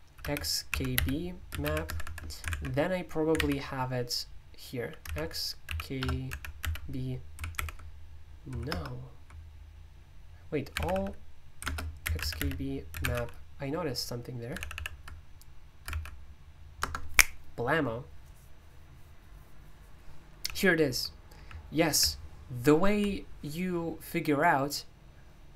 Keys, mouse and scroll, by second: 0.0-22.6 typing, 1.8 Escape, 2.0 Escape, 2.5 super+i, 3.3 alt+o, 7.5 ctrl+u, 8.7 ctrl+BackSpace, 11.6 ctrl+BackSpace, 14.5 Down, 14.7 Down, 15.8 Up, 16.8 Return.